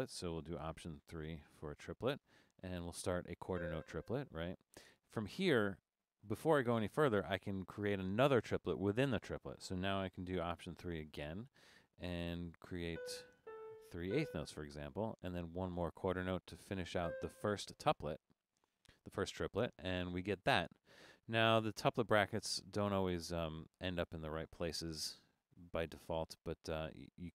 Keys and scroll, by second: 1.3 alt+3, 12.8 Down, 12.9 4, 13.3 Down, 13.5 4, 13.8 Up, 14.1 4, 19.9 Escape.